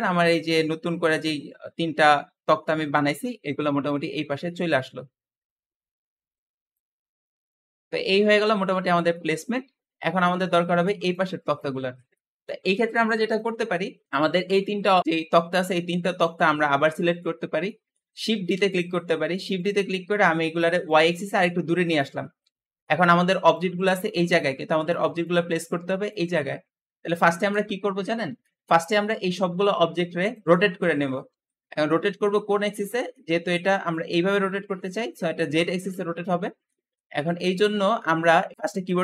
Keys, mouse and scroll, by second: 3.7 click, 6.9-7.2 scroll down 4, 7.2-14.0 middle drag, 14.4 click, 15.3 shift+click, 16.3-16.7 scroll down 2, 16.7-18.4 middle drag, 18.4 shift+d, 20.7 click, 22.3-27.6 middle drag, 28.3-31.6 shift+middle drag, 31.9-36.0 middle drag, 36.2-39.0 middle drag.